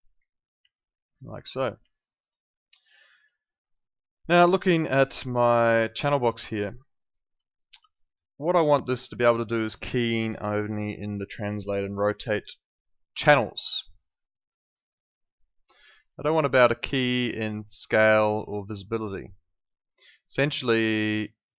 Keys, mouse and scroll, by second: 0.7 alt+click, 1.9 alt+click, 3.0 alt+click, 7.4 alt+click, 14.0 click, 16.9 click.